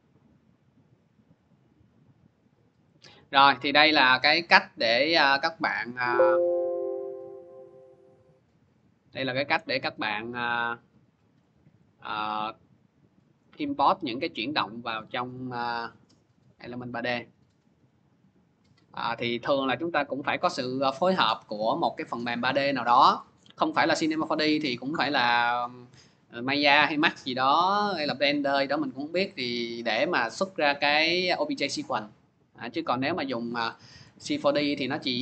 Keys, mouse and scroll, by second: 1.2 click, 2.8 click, 3.5 click, 4.5 click, 5.7 click, 6.8 click, 7.6 click, 8.3-9.5 scroll, 10.4 click, 10.6 scroll, 13.4 click, 14.7 click, 14.7-15.1 scroll, 16.5 click, 25.9 click, 32.2 click.